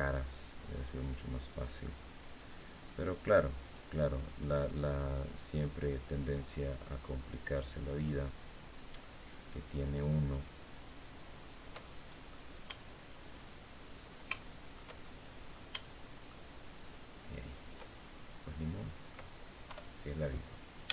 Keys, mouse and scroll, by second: 0.5 shift+right click, 1.3 shift+right click, 1.7 shift+middle click, 3.3 shift+right click, 4.0 shift+right click, 5.5 shift+right click, 6.1 shift+right click, 6.9 shift+right click, 7.4 shift+right click, 7.8-8.9 shift+middle drag, 10.0 shift+right click, 11.1 shift+right click, 11.5 shift+middle click, 12.9 shift+right click, 13.5 shift+right click, 14.1 shift+middle click, 15.1 middle click, 15.5 shift+click, 16.9 shift+right click, 17.7-18.4 shift+scroll down 2, 18.5 click, 19.4 KP_7, 20.3-20.7 scroll down 3, 20.8 shift+middle click.